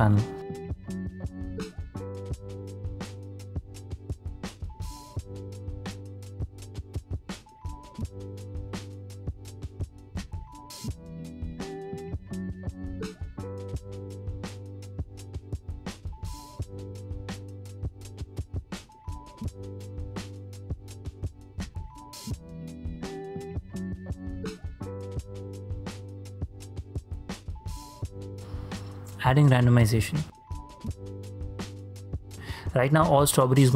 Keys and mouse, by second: 0.0 click, 0.6 click, 1.5 click, 1.7-2.9 shift+drag, 2.7 e, 4.6 click, 6.6 click, 9.1 ctrl+space, 9.7 shift+drag, 10.2 ctrl+click, 10.7 shift+click, 11.2 ctrl+space, 12.3-14.7 drag, 17.6 click, 20.4-22.2 drag, 23.4-24.6 drag, 25.3-25.8 middle drag, 25.9 shift+middle drag, 26.3-26.8 middle drag, 27.0 shift+middle click, 27.8 click, 30.8 g, 31.6 click, 31.9 middle click, 32.9 click.